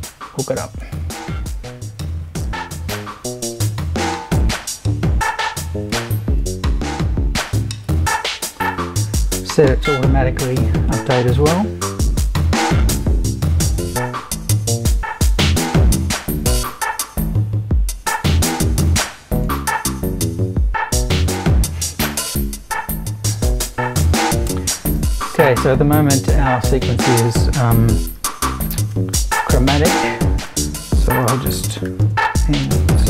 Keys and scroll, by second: 26.3 BackSpace, 28.2-33.0 typing.